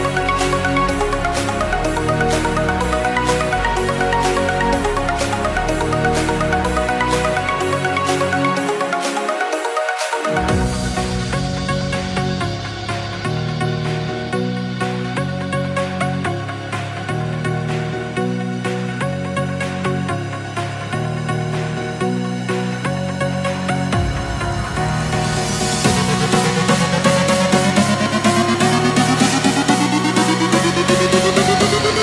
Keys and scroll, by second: 0.5 space, 2.4 space, 4.3 space, 5.5 space, 7.8 space, 8.6 ctrl+0, 9.5 v, 15.1 ctrl+alt+shift+e, 16.3 c, 23.5 Return, 25.2 ctrl+0, 26.3 v, 27.5 space, 28.0 space, 28.5 space, 29.2 n, 31.3 x.